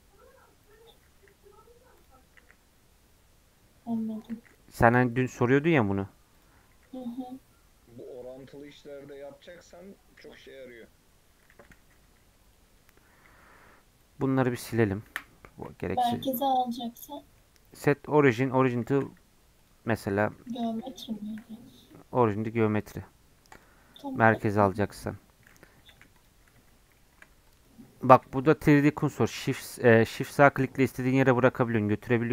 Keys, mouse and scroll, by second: 1.2 s, 2.4 s, 6.7 s, 11.2-11.5 scroll down 2, 11.5 r, 12.9-13.3 scroll down 7, 13.4 middle click, 14.0-15.1 drag, 15.1 Delete, 15.6-16.1 scroll up 2, 15.7 middle click, 17.2 middle click, 17.8-18.9 right drag, 18.9 shift+a, 21.2 shift+middle click, 21.4 scroll up 1, 21.8-25.7 right drag, 25.7 Tab, 25.9 1, 26.2 click, 26.4-26.9 scroll down 2, 26.6 Tab, 27.0 shift+middle click, 27.5 click, 27.8 scroll up 4, 29.3-32.3 shift+right drag.